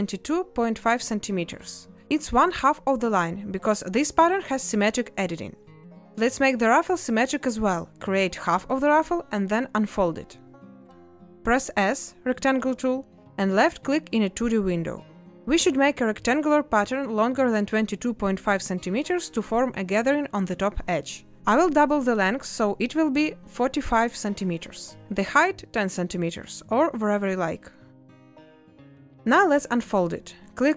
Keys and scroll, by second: 22.3 5, 29.2 z.